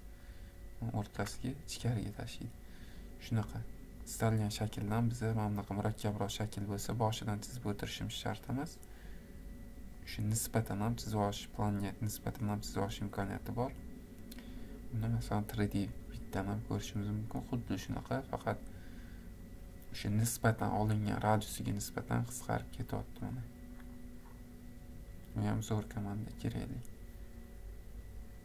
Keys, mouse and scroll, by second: 0.4 click, 0.9-2.2 scroll, 4.2 click, 4.6-5.4 scroll, 5.4-6.3 scroll, 6.3 scroll, 6.6 click, 6.8-8.3 scroll, 8.6 click, 10.1 click, 11.9 click, 13.2 click, 14.3 click, 16.0 click, 16.8-17.7 scroll, 17.8-19.0 scroll, 21.2 scroll, 22.7 scroll, 23.4-26.3 scroll, 26.3 scroll.